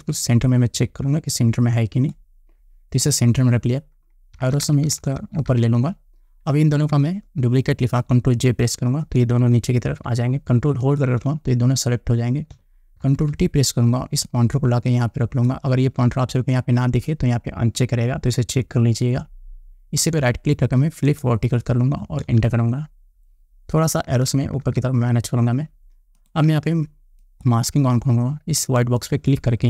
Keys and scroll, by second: 4.9 Up, 8.9 ctrl+j, 13.6 ctrl+t, 22.8 Return, 24.7 Up.